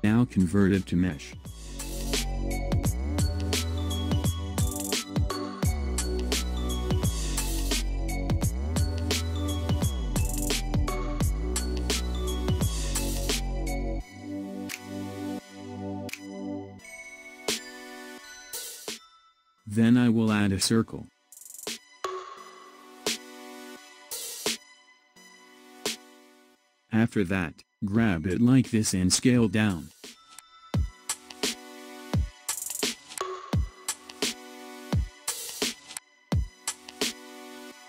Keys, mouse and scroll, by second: 1.2-4.2 drag, 5.8-6.3 scroll down 1, 6.3 click, 6.9-10.0 middle drag, 12.2-15.2 middle drag, 18.4 KP_1, 20.4 shift+a, 28.8 click, 33.7 s.